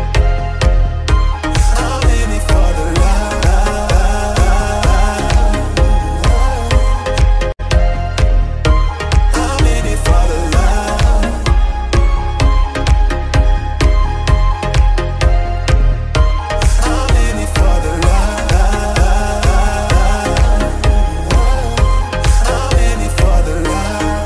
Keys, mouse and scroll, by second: 0.6 shift+Left, 1.6 scroll down 1, 3.8 click, 4.3 scroll up 1, 4.5 alt+a, 4.9-5.3 shift+middle drag, 5.3 ctrl+s, 5.4 scroll up 1, 5.8 shift+middle drag, 6.0 shift+scroll down 1, 6.2 space, 7.7 space, 9.1-10.3 drag, 10.3 KP_Enter, 11.0 a, 12.1 alt+a, 12.4-12.8 shift+middle drag, 12.8 space, 13.7 space, 14.3-15.0 scroll up 2, 15.0 KP_1, 16.7 Escape, 16.9 Left, 17.9 Right, 18.4 Left, 19.6 Right, 21.0 Left, 21.3 Right, 21.9 Left, 23.1 shift+middle click, 23.6 alt+a, 23.8 scroll up 1.